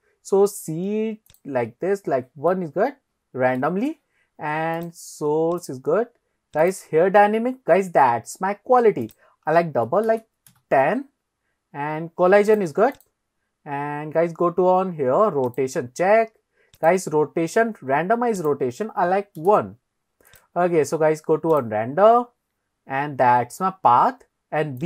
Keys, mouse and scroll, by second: 1.3 click, 2.5-3.6 middle drag, 4.8 click, 5.6 click, 6.6 click, 9.1-10.8 drag, 11.5-12.2 scroll down 2, 12.5 click, 13.0 click, 13.9-14.4 scroll down 2, 15.7 click, 16.8 click, 18.4-19.6 drag, 20.3 click, 21.6 click, 22.0-23.4 scroll down 3.